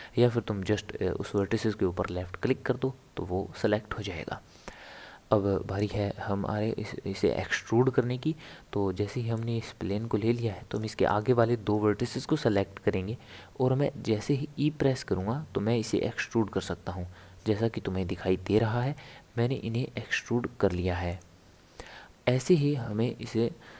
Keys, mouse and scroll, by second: 1.3 click, 9.3 click, 14.4 e, 22.9 scroll up 2, 23.0 scroll down 1, 23.3-23.7 scroll up 5.